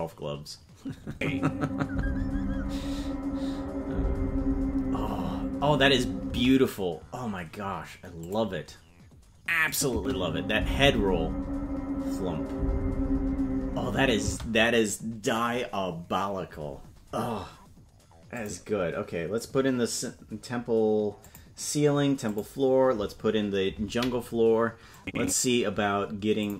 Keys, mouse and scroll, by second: 1.1 space, 6.3 space, 8.2 click, 9.7 click, 9.9 space, 14.2 space, 20.3 click, 21.4 click, 22.3 click, 24.9 click.